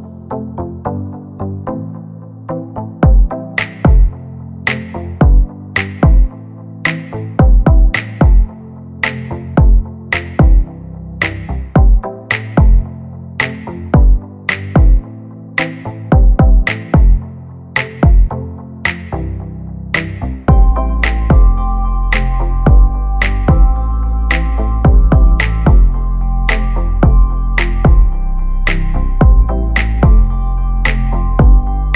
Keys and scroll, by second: 0.5 p, 2.5 space, 5.1 r, 6.7 space, 7.1 p, 13.1 1, 13.7 5, 13.9 Return, 14.8 space, 16.5 l, 18.6 space, 20.8-22.8 typing, 21.3 Up, 26.6 p, 29.4 space, 29.8 Escape, 31.1 m, 31.8 Right.